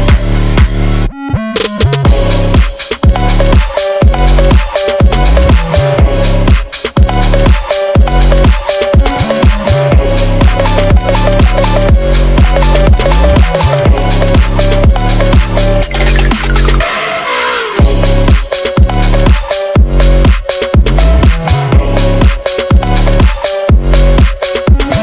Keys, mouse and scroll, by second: 0.2 scroll up 5, 0.3-1.0 drag, 1.2-1.8 drag, 2.0-2.6 drag.